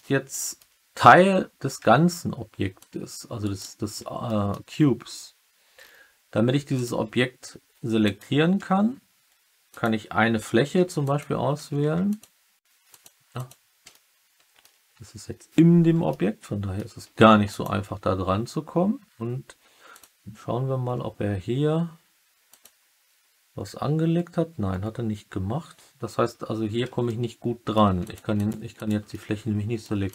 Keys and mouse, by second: 0.3 alt+middle click, 1.1 Tab, 1.7 Tab, 2.7 click, 3.4 middle click, 3.5 drag, 4.2 middle drag, 6.7 click, 6.9 Tab, 8.0 click, 9.6 click, 10.8 2, 11.0 click, 11.5 2, 11.7 3, 13.8 alt+middle click, 16.0 alt+middle click, 17.0 Tab, 17.4 click, 17.8 Tab, 22.4 click, 27.0 alt+middle click, 28.0 click, 29.0 alt+middle click.